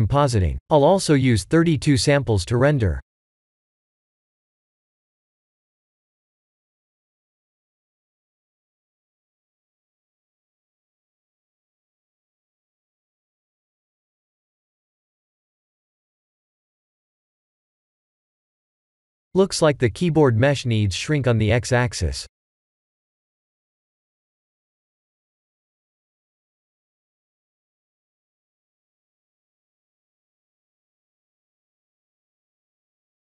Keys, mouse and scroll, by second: 0.4 click, 0.9 click, 1.7 click, 2.2 ctrl+s, 26.5 click, 27.6 middle click, 30.1 click, 30.9-31.8 scroll up 9, 32.8 shift+middle click.